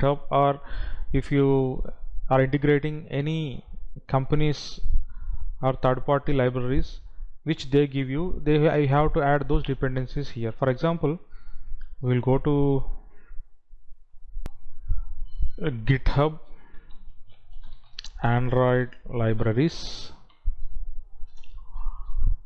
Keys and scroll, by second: 14.6 F9, 17.9 space, 19.1 space, 21.5 Down.